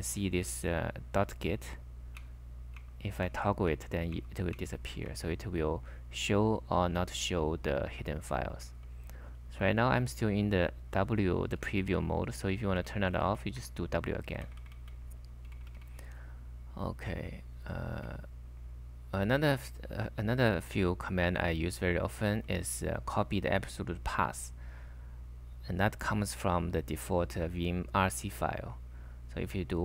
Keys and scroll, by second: 1.0 typing, 5.1 ., 8.0-10.3 typing, 11.6 k, 12.8-16.8 typing, 22.3 j, 29.7-29.8 typing.